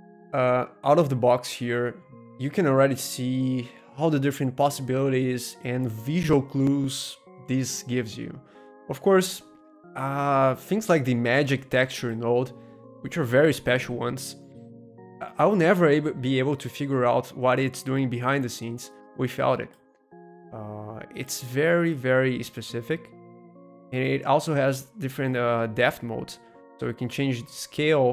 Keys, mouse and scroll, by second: 0.1-1.2 middle drag, 1.7 middle click, 2.4-3.7 middle drag, 4.0-6.0 middle drag, 8.0 middle click, 9.4 scroll up 1, 10.1-11.5 middle drag, 11.5-13.5 drag, 11.5 right click, 14.4-16.5 drag, 17.3-19.4 drag, 19.5-21.5 drag, 21.7-23.7 middle drag, 23.8-25.8 drag, 23.8-25.8 right drag, 26.2-28.1 drag, 26.2-28.1 right drag.